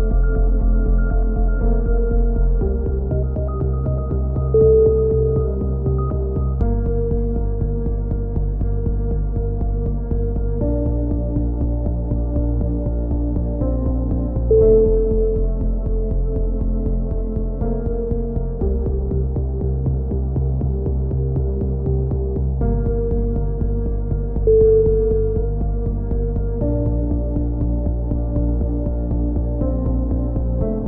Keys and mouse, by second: 0.2 right click, 0.7 x, 1.6 z, 2.2 z, 4.0 f, 4.3 a, 4.4 z, 5.3-6.9 middle drag, 5.9 z, 6.9-7.9 drag, 9.4-11.0 right drag, 10.5 f, 10.6 a, 11.2 ctrl+r, 12.0 KP_7, 12.4 z, 13.9 ctrl+r, 14.8 z, 15.2 a, 15.5-16.5 drag, 16.6 x, 17.9 click, 18.3 right click, 19.0 alt+m, 19.4 a, 19.8 KP_7, 20.4 z, 20.9 z, 21.1 middle click, 22.2 z, 22.7 click, 26.2 z, 26.9 click, 27.1 z, 27.9 g, 30.5 ctrl+z.